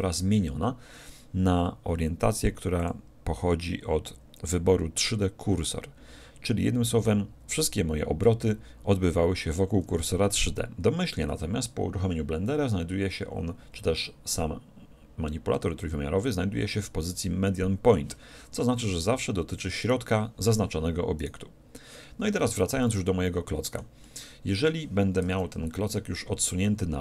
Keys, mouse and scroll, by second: 2.8-4.8 drag, 19.8-23.0 right drag, 22.5 z, 23.1-25.8 middle drag, 25.3 KP_1, 26.3 z.